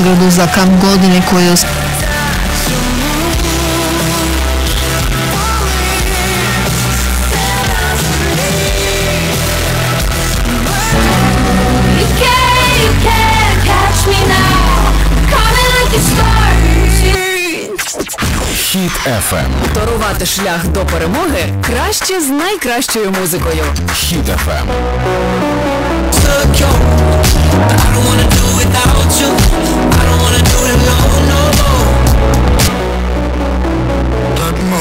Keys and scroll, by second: 2.2 Page_Down, 17.7 Page_Down, 32.5 Page_Down.